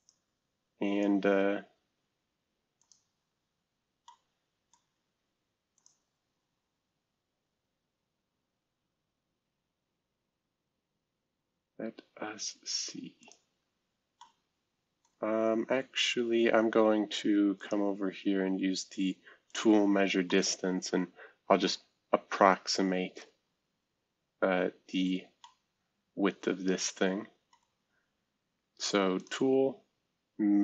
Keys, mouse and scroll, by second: 0.0-1.0 drag, 2.8 click, 4.0-5.6 middle drag, 5.7 click, 9.8-10.6 scroll up 2, 10.6 scroll up 1, 10.9 scroll down 2, 14.2-16.2 middle drag, 19.5 click, 20.3-22.1 middle drag, 22.1-22.7 scroll up 2, 24.0-24.8 scroll down 2, 25.0-25.4 scroll up 2, 25.4-27.5 middle drag, 28.0-29.2 scroll up 2, 29.2 click.